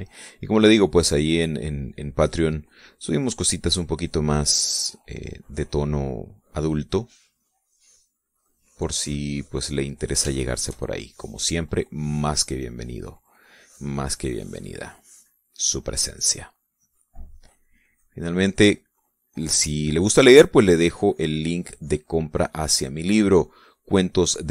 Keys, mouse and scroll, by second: 1.2-3.3 drag, 3.8-5.4 drag, 5.5 click, 7.7 click, 8.8 click, 9.4 click, 10.4-11.4 middle drag, 11.6-13.3 shift+middle drag, 13.8-16.3 drag, 18.0-20.4 drag, 20.5 middle click, 21.7-24.5 drag.